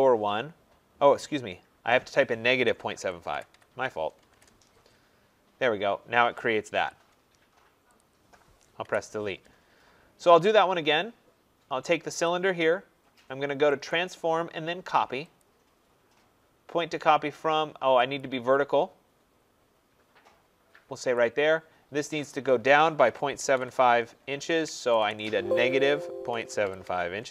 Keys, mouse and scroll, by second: 2.3-4.8 typing, 6.7 Return, 7.9 click, 8.8 Delete, 10.0 middle click, 10.1 middle click, 10.7 middle click, 10.7 middle click, 10.8 middle click, 10.9 middle click, 12.2 click, 13.9 click, 18.1 click, 21.1 click, 22.7-27.3 typing.